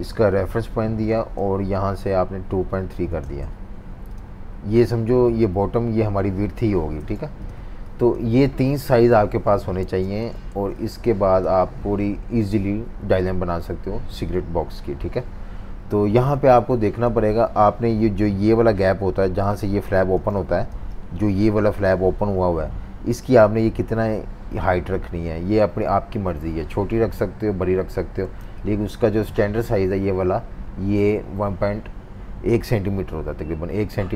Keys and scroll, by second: 2.3-3.4 typing, 7.0 super+y, 8.9 super+-, 9.1 super+-, 9.6-11.0 typing, 14.5 v, 16.3-17.4 typing, 20.2-20.8 typing, 28.3-28.9 typing.